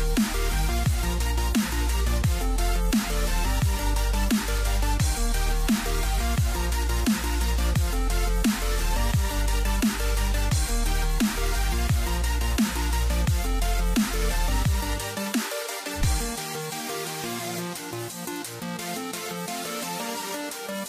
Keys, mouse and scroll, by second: 5.3 click, 8.1-11.0 middle drag, 11.0 x, 13.9-16.8 middle drag, 19.7 click.